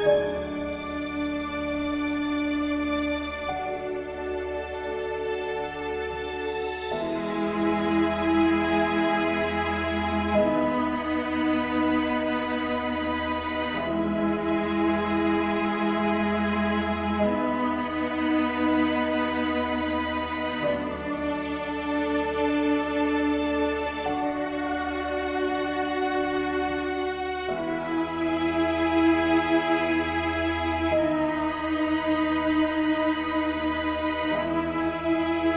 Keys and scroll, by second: 29.0 ctrl+space, 34.7 ctrl+a.